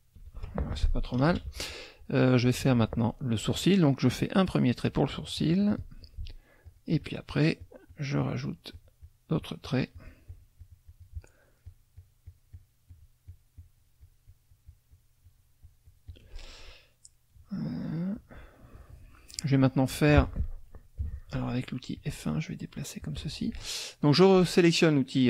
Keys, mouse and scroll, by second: 1.1 KP_Subtract, 4.4-6.0 drag, 6.6 shift+click, 11.7-12.8 shift+drag, 12.9 shift+click, 16.9 click, 19.3 click, 21.0 F1, 22.0-23.2 drag, 23.8 click.